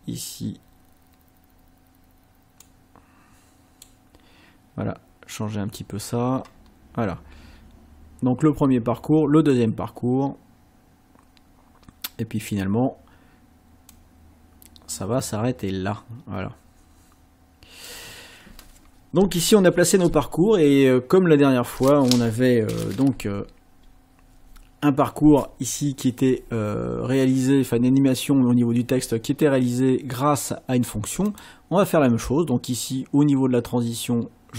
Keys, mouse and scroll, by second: 2.7-4.0 drag, 6.6-7.3 scroll up 2, 9.5-12.7 drag, 13.9-18.1 drag, 21.3-21.7 scroll up 2, 31.3 click.